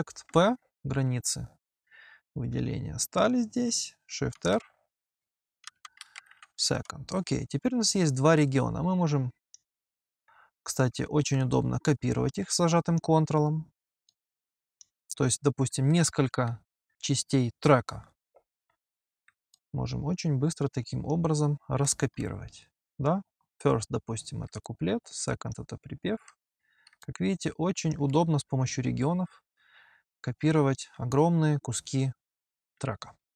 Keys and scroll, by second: 0.1 Return, 3.5 p, 4.2 shift+r, 5.3-6.7 typing, 11.1 Return.